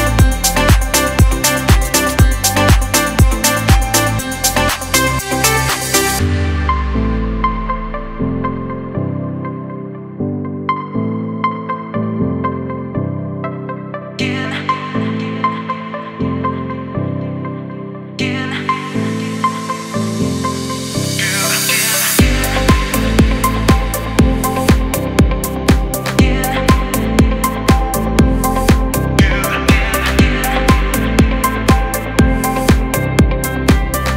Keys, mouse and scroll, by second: 0.6 ctrl+c, 1.7 click, 2.2 alt+scroll up 1, 2.8 click, 2.8 typing, 3.2-5.7 alt+drag, 5.3 t, 5.7 click, 6.3 ctrl+a, 6.7 ctrl+v, 9.1-13.9 drag, 9.1 typing, 13.9 alt+scroll down 1, 17.1 typing, 18.7 click, 19.7 Return, 21.4 click, 23.6-34.1 drag, 33.3 typing.